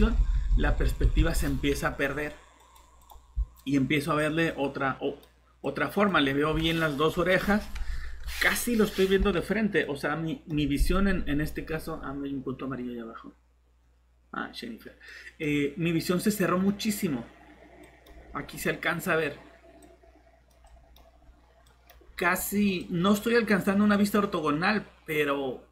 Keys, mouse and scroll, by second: 3.7 alt+0, 7.2 typing, 8.8-9.6 typing, 10.7 scroll up 1, 11.6-12.4 scroll down 1, 13.5-18.3 typing, 15.0 click, 18.2 scroll up 1, 19.4-24.6 typing, 19.9 click, 21.1 scroll up 1, 21.8 click, 22.1 scroll up 1, 22.8 click.